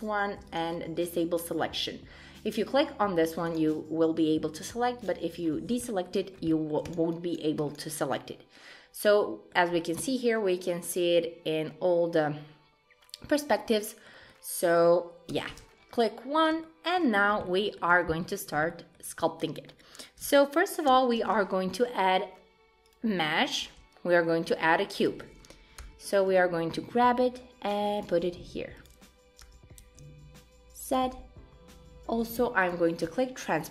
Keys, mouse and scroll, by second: 0.5 click, 2.5 click, 3.4 click, 5.0 click, 5.4-5.8 scroll down 5, 5.8 shift+middle click, 6.2-6.5 scroll up 4, 6.5 shift+middle click, 6.8 click, 7.1 click, 7.6 click, 7.9 scroll down 1, 8.0 middle click, 9.8 scroll down 1, 10.0 middle click, 14.3 middle click, 15.3 KP_1, 15.8-16.5 scroll up 1, 16.5 scroll up 1, 16.6 shift+middle click, 17.2 scroll up 2, 17.4 shift+middle click, 18.3-18.7 scroll down 3, 18.7 shift+middle click, 20.9 shift+a, 23.6 s, 25.8 g, 28.3 s, 29.4 g, 32.6 click.